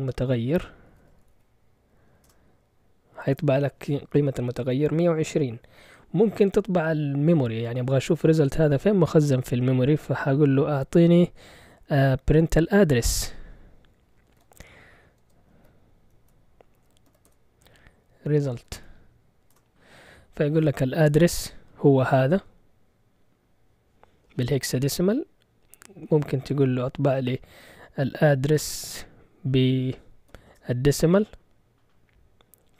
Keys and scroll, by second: 0.6-1.8 typing, 2.2 Return, 12.3-13.1 typing, 14.4-19.5 typing, 25.2-26.4 typing, 25.8 Left, 30.3 d, 30.5 Return.